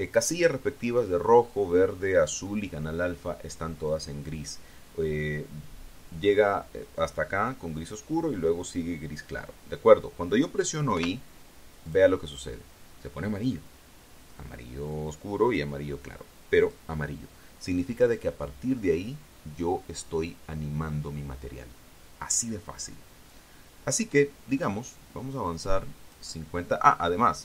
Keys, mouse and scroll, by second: 11.7 i, 12.7 click, 17.4 click, 26.3 click.